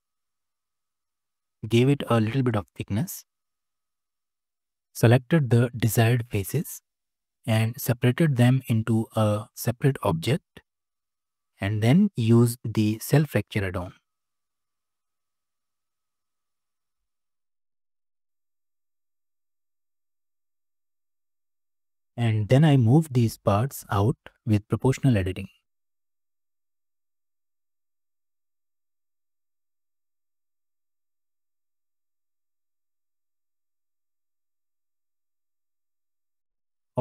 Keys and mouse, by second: 1.6-3.7 middle drag, 3.9 shift+middle drag, 7.4 p, 11.1 Tab, 11.7 F3, 20.9 middle click, 24.5 g, 27.7 drag, 28.0-28.9 middle drag, 29.5 click, 30.0 middle click, 30.5 g, 33.2-33.9 drag, 34.1 g, 35.6 click.